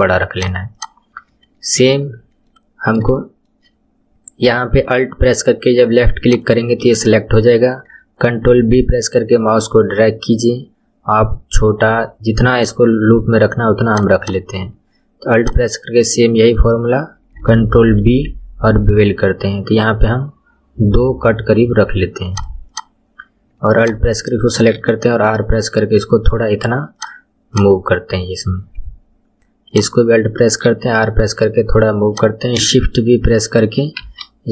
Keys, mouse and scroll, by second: 0.7 click, 1.9 ctrl+middle click, 2.7-3.1 scroll down 2, 3.1-6.2 shift+middle drag, 6.2 alt+click, 8.5 ctrl+b, 14.2 click, 15.4 alt+click, 18.0 ctrl+b, 22.7 click, 23.8 alt+click, 24.7 r, 27.5 click, 29.7 alt+click, 30.6 r, 34.0 shift+v.